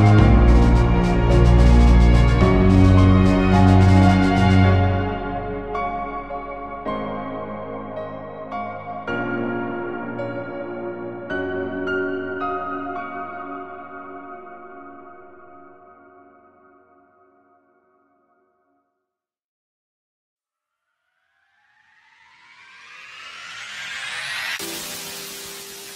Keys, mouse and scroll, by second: 2.6 click, 2.9 Tab, 3.1 alt+a, 3.2 scroll down 2, 3.5-3.9 scroll up 2, 4.0 click, 4.1 Tab, 4.4 click, 4.7 ctrl+click, 6.7 click, 6.9 ctrl+z, 10.8 click, 11.0 Tab, 11.1 alt+a, 11.2 scroll down 4, 11.5-12.0 scroll up 4, 11.6 shift+middle click, 12.0 alt+a, 12.0 scroll down 2, 12.4 scroll up 5, 12.8 click, 13.0 alt+a, 13.4 click, 14.8 alt+a, 15.1 alt+h, 15.3 alt+a, 19.8 click, 19.9 scroll up 3, 20.3-20.6 scroll down 8, 20.8 scroll up 3, 22.3 click, 22.4 alt+a, 22.5 scroll down 4, 23.0 scroll up 4, 23.4 click, 23.9 h, 25.0 click, 25.1 alt+a, 25.2 scroll down 4, 25.3 shift+middle click, 25.9 scroll up 3.